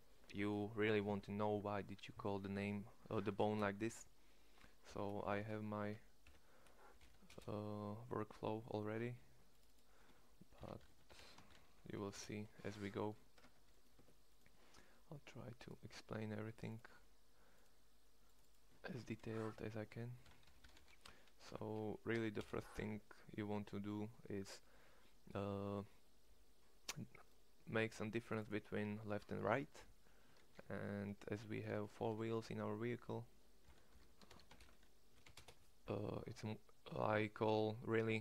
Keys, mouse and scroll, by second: 5.3 p, 13.4 Tab, 13.9 Tab, 20.5 p.